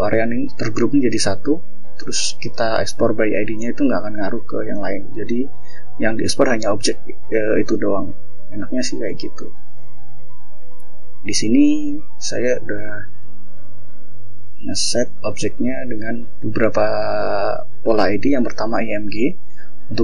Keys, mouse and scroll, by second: 0.2-1.0 ctrl+scroll up 3, 1.0 click, 1.6 ctrl+scroll up 2, 2.3-3.1 ctrl+scroll down 4, 3.4 ctrl+scroll up 2, 4.7 scroll down 2, 5.2 scroll up 2, 7.6 space, 10.4 click, 11.9 ctrl+shift+o, 14.2 click, 18.4 click, 19.4-20.0 scroll down 2.